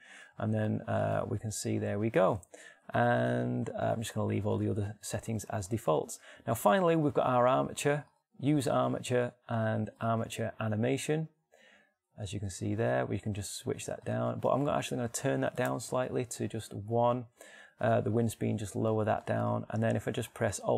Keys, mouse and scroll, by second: 0.1-3.6 middle drag, 20.6-20.7 middle drag.